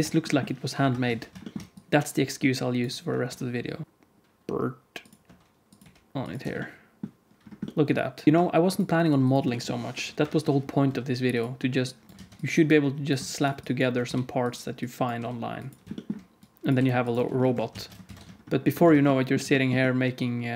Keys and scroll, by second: 0.7 KP_7, 1.0 alt+z, 3.2 r, 3.8 g, 5.2 r, 5.7 g, 6.4 Tab, 10.1 KP_7, 10.8 g, 12.1 alt+z, 14.0 g, 15.1 g, 17.1 Tab, 17.5 alt+z, 17.6 alt+a, 18.0 ctrl+s, 18.9 ctrl+s.